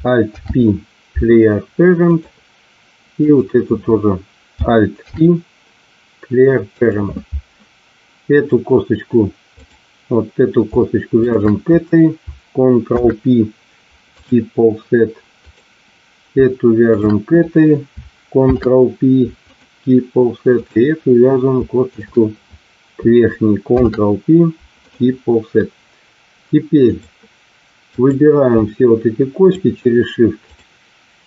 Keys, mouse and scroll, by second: 0.2 alt+p, 3.2 click, 4.9 alt+p, 8.3 click, 11.2 shift+click, 12.8 ctrl+p, 18.4 ctrl+p, 23.6 ctrl+p, 26.8 click, 29.5 shift+click, 30.5 shift+click.